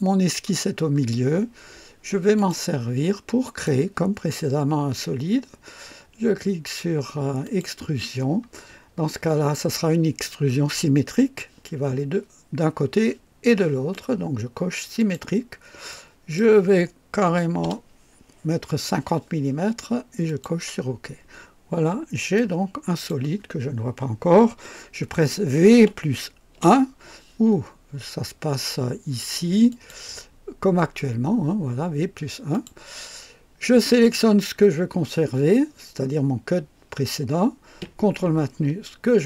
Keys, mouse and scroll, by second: 0.7 scroll down 1, 1.6-2.4 typing, 2.4 click, 3.5 click, 5.8-6.6 typing, 7.4 click, 15.0 click, 15.9 click, 17.3 KP_5, 17.6 KP_0, 20.3 click, 22.4-23.3 drag, 25.7 v, 26.6 KP_1, 29.7 click, 32.5 click, 33.9 click.